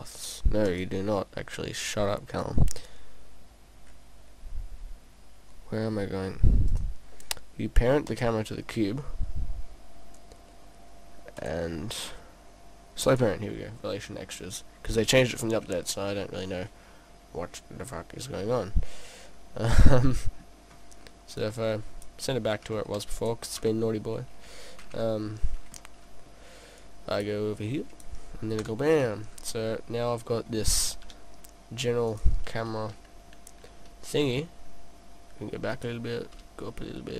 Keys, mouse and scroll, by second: 0.7 click, 3.9-4.3 scroll down 2, 4.3-5.5 scroll up 5, 5.9 scroll up 3, 6.7 click, 10.2-11.4 scroll down 3, 11.4 click, 11.4-11.9 scroll down 1, 11.9 click, 11.9-12.3 scroll down 3, 13.2 click, 17.0-18.5 scroll up 1, 19.0-20.2 scroll down 4, 19.7 middle click, 20.7-21.0 scroll up 1, 21.4 click, 22.6 click, 23.6 KP_0, 25.8 middle click, 26.8 click, 27.6 click, 28.6 KP_0, 29.7-30.2 scroll up 1, 30.4-30.7 scroll up 2, 31.1 g, 32.2 click, 32.7 g, 35.8 click, 36.4 g.